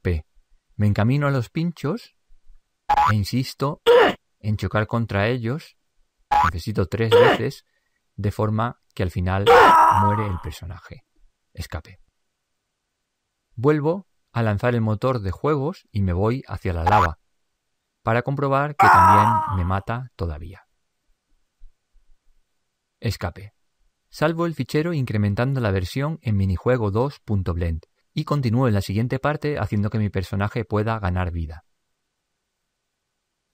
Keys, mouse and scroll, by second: 0.9 p, 13.8 p, 31.3-32.6 drag.